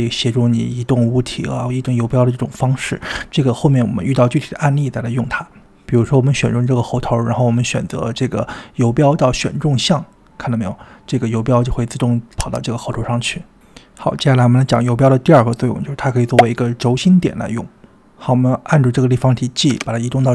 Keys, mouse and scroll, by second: 14.1-15.1 middle drag, 18.1 click, 19.7 g.